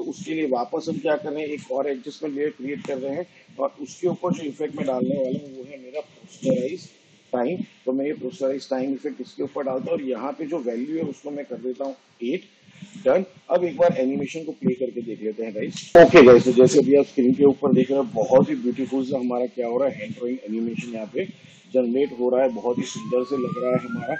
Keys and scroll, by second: 1.4 ctrl+alt+y, 5.0-7.3 typing, 11.8 8, 15.8 space, 18.0 space.